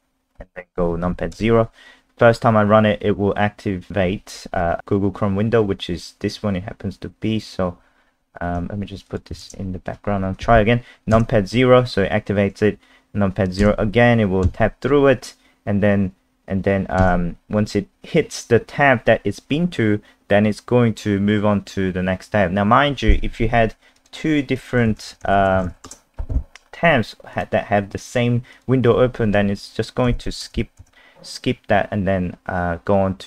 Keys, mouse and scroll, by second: 1.3 KP_0, 9.1 click, 9.4 ctrl+alt+space, 11.1 KP_0, 24.0 click, 24.6-26.2 typing, 27.3 click, 30.0 KP_0, 30.4 KP_0, 30.8 KP_0.